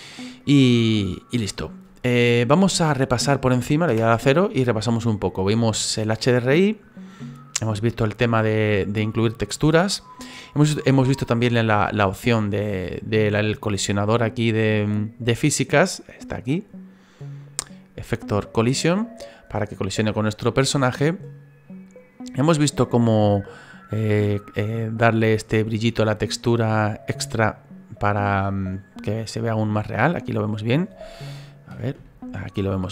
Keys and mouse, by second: 1.5 click, 2.9 click, 3.9 KP_0, 4.7 middle click, 8.0 middle click, 8.7 middle click, 10.7 middle click, 13.6 right click, 16.3 click, 23.0 right click, 24.3 click, 25.2 middle click, 28.7 middle click, 30.2 middle click, 32.0 shift+middle click.